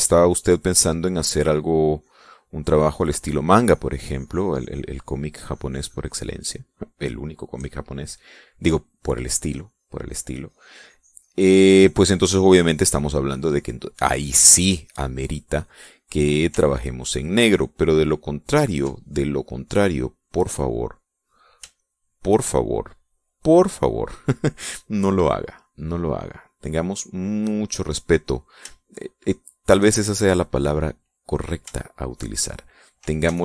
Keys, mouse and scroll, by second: 2.4-7.5 drag, 8.1 middle click, 10.0-11.9 drag, 12.3-14.1 drag, 14.4 click, 15.3-16.3 middle drag, 17.2-19.5 ctrl+drag, 20.2 click, 22.2 shift+click, 25.7-28.4 drag, 29.2-30.4 shift+drag, 32.3 shift+click.